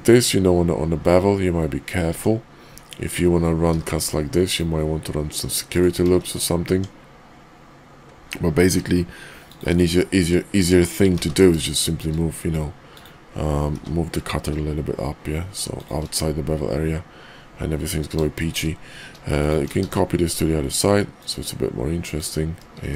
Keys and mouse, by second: 2.0 Tab, 3.6 ctrl+r, 6.0 ctrl+z, 6.6 Tab, 8.5 q, 13.7 g, 18.4 shift+middle drag, 19.3 shift+click, 19.7 alt+x, 21.2 click, 22.8 shift+2.